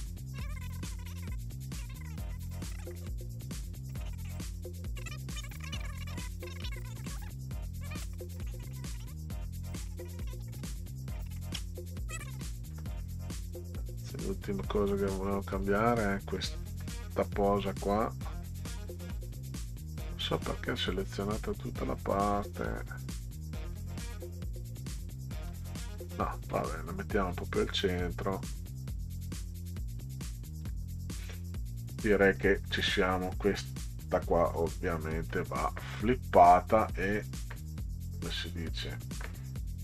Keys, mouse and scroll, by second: 0.7 click, 1.2 click, 1.3 middle click, 1.6 click, 2.3-3.3 drag, 3.6 click, 4.1 click, 4.9 middle click, 5.5 middle click, 6.3 middle click, 6.8 middle click, 7.4 middle click, 8.9 click, 9.6 click, 10.6 click, 11.5 middle click, 11.7 middle click, 13.8-15.7 drag, 23.7 Up, 25.5 Down, 26.0 Right, 26.5 Right, 27.2 Right, 29.5 Down, 30.6 Up, 32.2 click, 34.0 click.